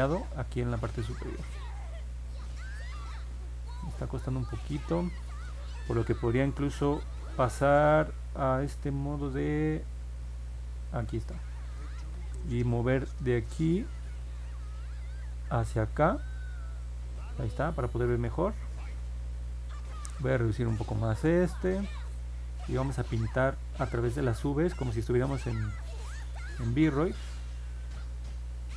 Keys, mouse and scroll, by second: 0.0 click, 0.6 click, 1.5 click, 3.9 click, 4.6 click, 9.3 F2, 10.0 F1, 15.2-17.5 drag, 24.7 click, 26.0 click, 27.4 click, 28.0 click, 28.6 click.